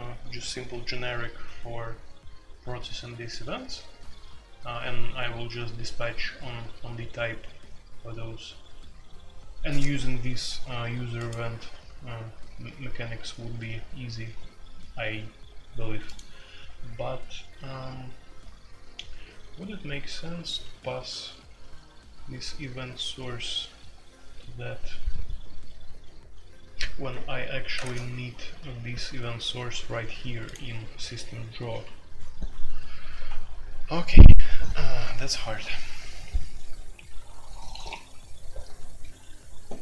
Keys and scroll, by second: 27.7 space, 27.8 Tab, 31.8 Escape.